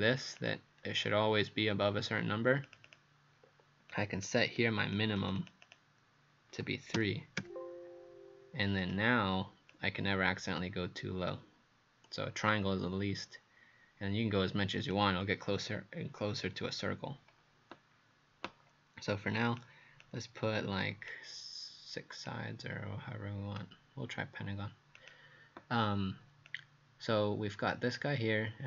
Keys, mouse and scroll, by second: 0.8-1.2 scroll down 2, 1.8-2.7 scroll up 1, 2.7 click, 2.9 click, 3.9 click, 4.6 click, 5.4 click, 5.6 click, 7.0 KP_3, 7.4 KP_Enter, 8.8 click, 20.0 click, 22.3 click.